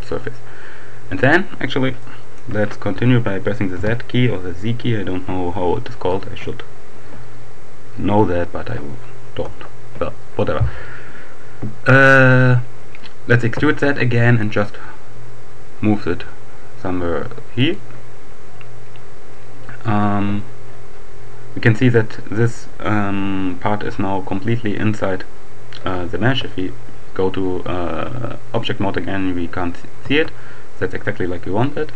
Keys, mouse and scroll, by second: 0.4-0.8 scroll down 1, 2.0 shift+click, 3.4 z, 13.3 e, 17.2-18.2 drag, 18.3-19.5 scroll down 1, 26.2 Tab, 30.0 Tab, 31.6-31.9 drag.